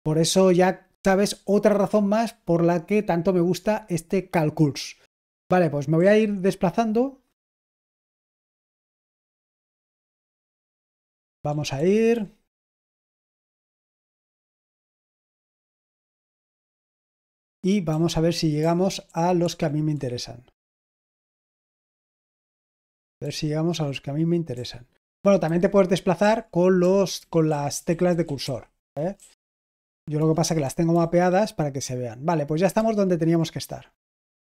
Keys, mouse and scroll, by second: 5.7-6.4 typing, 8.2-12.6 typing, 14.4-16.6 typing, 17.8-20.0 typing, 22.0-23.3 typing, 25.4 Left, 26.1 Right, 26.7 Up, 27.1 Down, 27.4-30.5 typing, 32.7 typing.